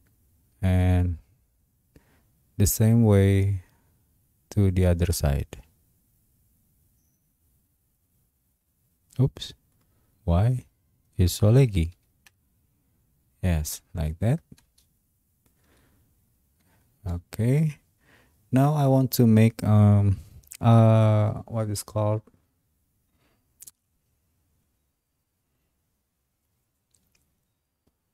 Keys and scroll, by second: 10.8-12.5 typing, 15.7 Escape.